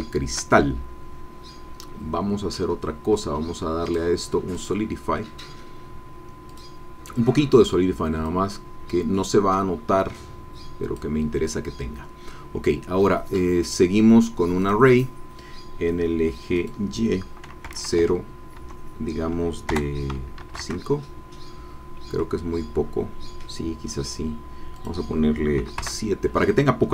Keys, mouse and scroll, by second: 3.8 click, 4.5 click, 6.4 click, 8.2-11.2 drag, 13.6 click, 14.6 click, 16.6 click, 17.6 KP_0, 18.1 Tab, 18.7 KP_1, 19.7 BackSpace, 20.4 KP_5, 20.6 KP_Enter, 21.8 scroll down 2, 22.2-23.6 drag, 24.7 click, 25.6 KP_7, 25.8 KP_Enter.